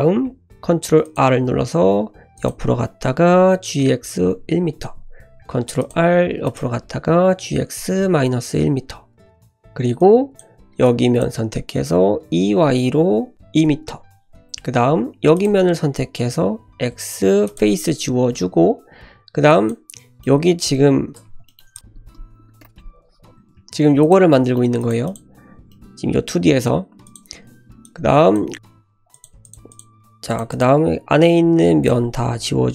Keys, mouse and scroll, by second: 0.5 ctrl+r, 3.5 g, 5.5 ctrl+r, 7.3 g, 10.0 click, 10.8 shift+click, 12.1 e, 14.8 3, 15.3 click, 16.6 x, 18.1 1, 18.7-19.5 scroll up 1, 19.5 click, 20.0 scroll down 1, 20.2 middle click, 21.2 Tab, 21.4 shift+middle click, 21.7 click, 21.8 ctrl+z, 21.8 r, 22.7 `, 23.1 scroll up 1, 23.4 g, 24.3 shift+middle drag, 24.8 click, 25.0 click, 25.4 Tab, 25.7 middle click, 26.8 scroll up 1, 27.0 click, 27.8 click, 28.5 3, 29.1 click, 29.4 shift+click, 29.7 shift+click, 30.3 shift+drag, 30.5 shift+click, 30.8 x, 32.3 2.